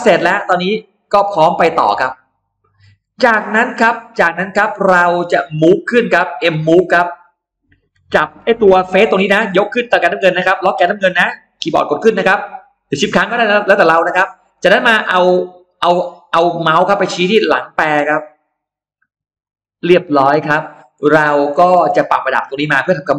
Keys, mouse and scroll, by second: 3.0-3.5 scroll down 1, 3.5-4.5 scroll up 2, 4.2 middle click, 5.4 click, 6.1-6.7 scroll up 2, 7.7 middle click, 8.1 m, 9.1 click, 11.4 Up, 13.4 middle click, 19.3 click, 19.9-20.6 scroll down 2, 20.8 middle click, 20.8 scroll up 1, 21.0 scroll down 1, 21.1-21.7 scroll up 2, 21.7 space, 21.8 click, 22.1-23.1 middle drag.